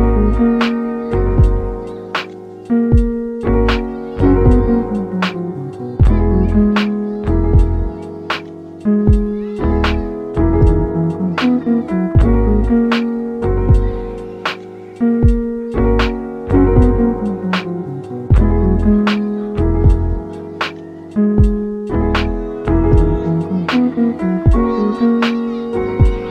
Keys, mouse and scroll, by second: 0.8 scroll up 1, 1.0-4.1 middle drag, 4.5-6.3 drag, 6.3 t, 6.6 t, 7.7-8.3 scroll up 3, 8.3-10.9 middle drag, 10.9-11.8 scroll down 3, 11.8 click, 12.3 click, 13.3 click, 14.2-14.6 scroll up 4, 14.6-22.5 drag, 22.5-24.2 scroll down 10, 24.2-24.7 scroll down 1, 24.7 click, 25.5-26.3 scroll down 11.